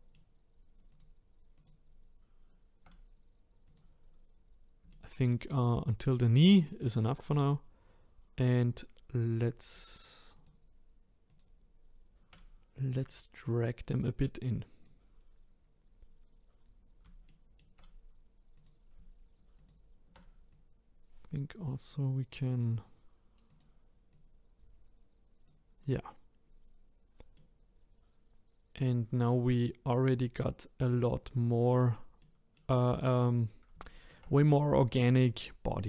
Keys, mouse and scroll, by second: 0.9 shift+click, 1.5 shift+click, 3.6 click, 4.9-6.9 shift+middle drag, 10.3 shift+click, 11.3 shift+click, 13.0 click, 16.5-17.2 scroll down 2, 17.2-18.5 shift+middle drag, 18.5 click, 19.5 shift+click, 20.5 click, 23.5 click, 24.1 click, 27.3-30.4 middle drag, 32.2-35.8 middle drag.